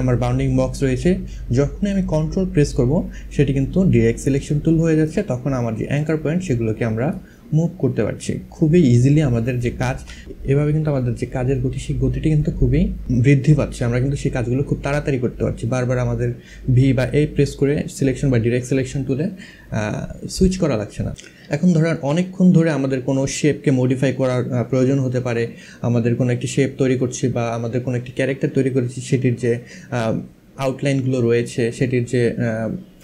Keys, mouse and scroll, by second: 4.7 ctrl+click, 9.1 ctrl+z.